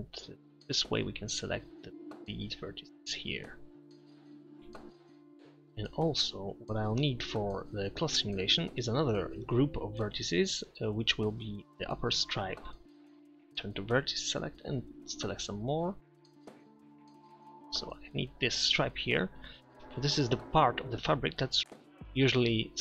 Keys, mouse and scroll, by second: 2.6 middle click, 13.3 ctrl+KP_Add, 14.8 ctrl+KP_Add, 16.6 ctrl+KP_Add, 17.3 ctrl+z.